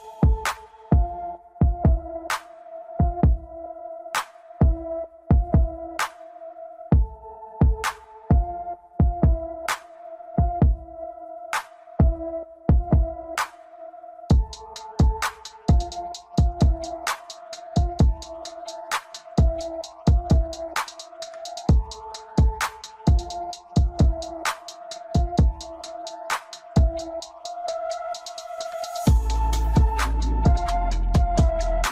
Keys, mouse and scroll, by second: 1.5-1.9 scroll up 1, 1.9-3.7 middle drag, 3.7 KP_1, 4.0 scroll up 3, 4.1 Tab, 4.3 click, 10.8-11.2 scroll down 1, 11.2-11.7 middle drag, 11.7 scroll up 2, 11.8 Tab, 13.1 Tab, 13.9 click, 16.5-22.3 drag, 22.3 scroll down 1, 22.6-24.7 middle drag, 24.7-25.3 scroll up 2, 26.0-27.5 scroll down 2, 27.5-30.5 drag, 30.8-31.2 scroll down 2, 31.2-31.9 middle drag.